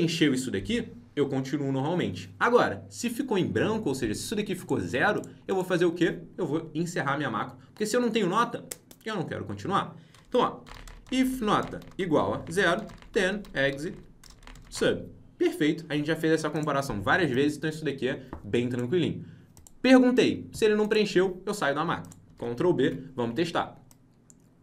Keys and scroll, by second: 22.3 ctrl+b, 22.8 alt+Tab.